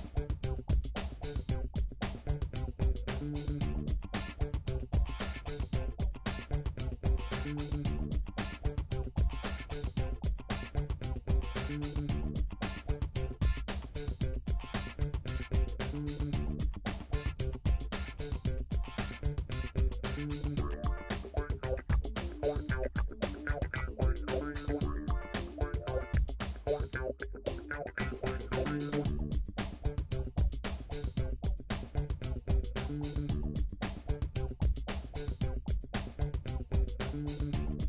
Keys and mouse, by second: 1.4 ctrl+r, 3.6 click, 3.7 middle click, 4.1 shift+click, 4.8 j, 7.6-8.6 middle drag, 9.4 click, 9.8 shift+click, 10.2 shift+click, 11.0 f, 11.2 click, 11.8-12.8 shift+middle drag, 12.5 ctrl+z, 12.8 ctrl+z, 13.8-15.4 middle drag, 14.7 f, 15.0 f, 16.0 f, 17.1 ctrl+r, 18.4 click, 18.5 shift+middle click, 19.3-21.8 middle drag, 19.8 j, 22.0 alt+click, 22.6 shift+click, 23.0 shift+click, 24.0-28.8 drag, 30.2 KP_7, 32.5 s, 33.9-37.6 drag, 37.6-37.8 middle drag.